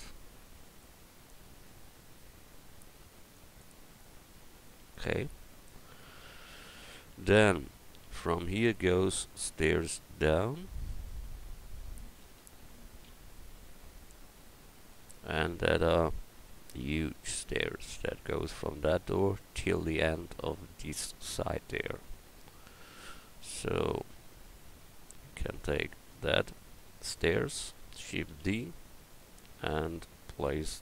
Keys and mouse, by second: 3.5-5.2 drag, 10.9 a, 12.4 KP_1, 25.4 right click, 26.1 Tab, 26.4-26.9 right drag, 28.3 shift+d.